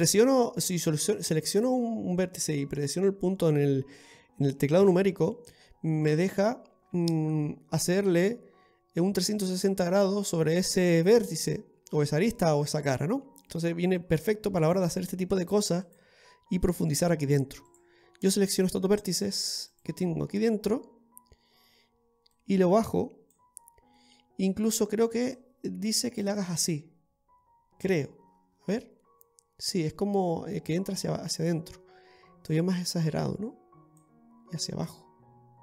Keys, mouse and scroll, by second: 0.2-1.5 scroll down 2, 1.5 right click, 5.7-6.2 scroll down 2, 6.1 middle click, 15.9 click, 17.7 right click, 18.5-19.0 scroll down 3, 19.0 middle click, 19.7 right click, 20.8 middle click, 22.4 click, 24.0 middle click, 25.4 click, 28.3 scroll down 1, 30.9 scroll down 4, 31.7 scroll up 3, 32.5 click, 32.5-34.0 scroll up 1.